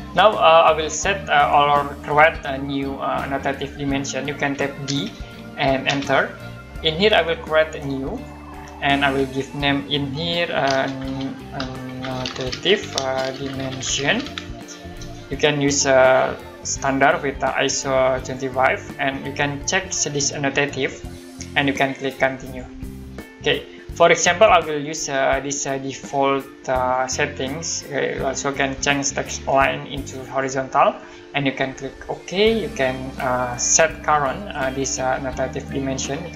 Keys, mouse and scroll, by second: 0.1 middle click, 4.8 d, 5.8 space, 8.1 click, 10.4-15.5 typing, 16.7 click, 18.2 click, 20.8 click, 22.4 click, 26.9 click, 30.3 click, 32.0 click, 34.1 click.